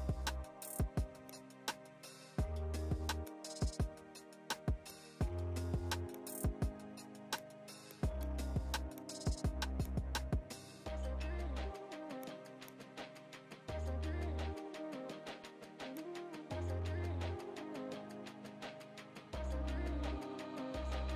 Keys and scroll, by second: 6.6 ctrl+z, 17.0 ctrl+h.